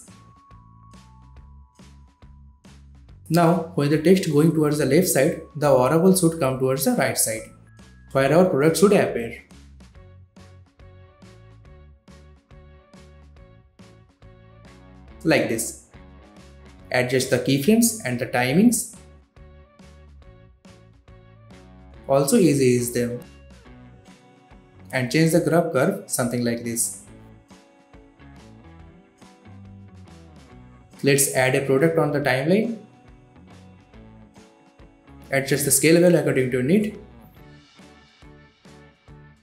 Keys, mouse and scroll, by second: 0.8-1.4 click, 1.3 space, 3.4 click, 5.0 shift+p, 8.2-9.3 drag, 16.7-19.4 drag, 19.4-20.7 typing, 21.9 space, 22.1-22.7 drag, 23.5 F9, 24.3 click, 24.7 ctrl+z, 24.8 click, 27.4 space, 29.9-34.1 drag, 35.1 s, 35.8-37.3 drag.